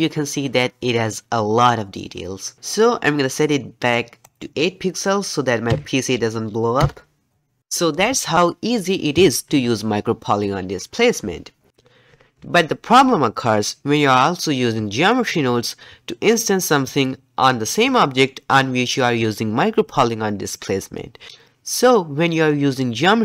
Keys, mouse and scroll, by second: 4.2-7.3 drag.